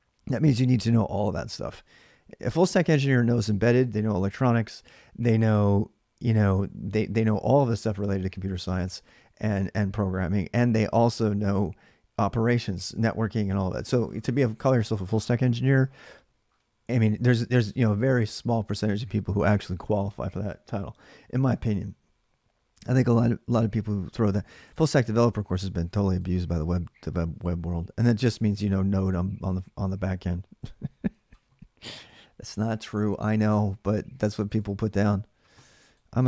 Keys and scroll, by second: 24.7-26.2 typing, 33.2-34.0 typing.